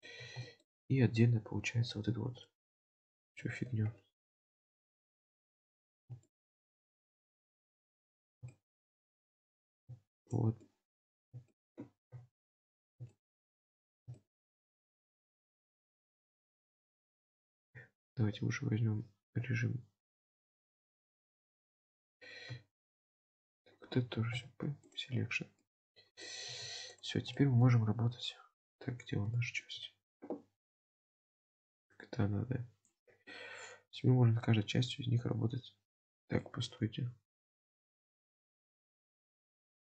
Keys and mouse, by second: 0.5 shift+middle click, 2.5 shift+middle click, 3.3 KP_7, 4.5 alt+z, 5.3 click, 6.4 shift+middle click, 7.6 middle click, 8.3 alt+z, 8.6 shift+middle click, 10.2 shift+click, 10.6 middle click, 11.6 shift+middle click, 12.1 KP_Decimal, 13.2-13.5 shift+middle drag, 14.2-14.7 shift+middle drag, 16.5 shift+click, 20.0 3, 21.4 KP_7, 22.9 shift+click, 24.3 p, 25.6 middle click, 26.5 Tab, 27.0 drag, 27.3-27.7 shift+middle drag, 28.7 click, 29.4 shift+middle click, 31.4 click, 31.8 click, 33.3-36.0 middle drag, 36.5 shift+middle drag.